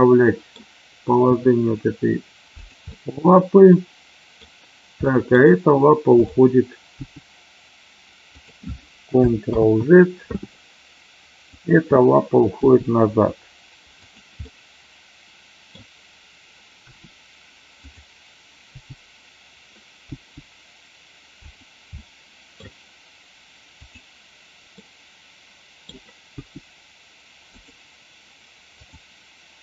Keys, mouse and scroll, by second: 1.2 g, 2.6 click, 2.9-4.4 middle drag, 5.0 middle drag, 6.0 click, 7.0 g, 8.3 click, 9.7 ctrl+z, 11.4 click, 12.5 g, 13.9 click, 14.4-15.7 middle drag, 16.8 r, 17.8 click, 18.7 g, 20.0 g, 21.4 click, 21.9 scroll up 1, 22.0 middle click, 22.5 scroll down 1, 23.8 click, 24.8-25.9 middle drag, 26.3 g, 27.4 click, 28.7 click.